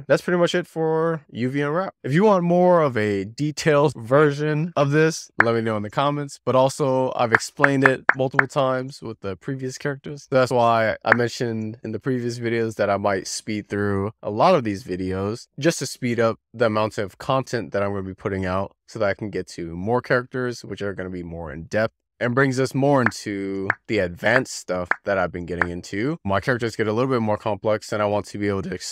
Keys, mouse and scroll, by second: 0.1 z, 2.4 w, 4.2-4.6 scroll down 1, 4.6 /, 5.1 middle click, 5.4-6.1 scroll down 10, 6.1-7.5 middle drag, 11.0 z, 11.6 click, 12.1-13.8 typing, 15.5 Tab, 15.7-16.9 shift+middle drag, 17.3-17.8 scroll up 5, 17.8 shift+middle click, 18.5 shift+middle click, 19.6 s, 20.3 click, 21.0 scroll down 2, 21.2 shift+middle click, 21.6-22.5 scroll down 1.